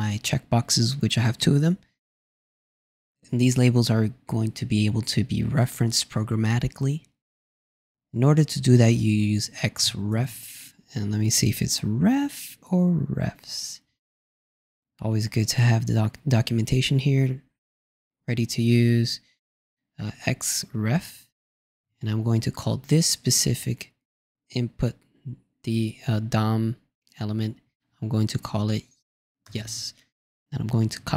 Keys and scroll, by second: 21.6 shift+=, 21.7 shift+', 30.9 shift+'.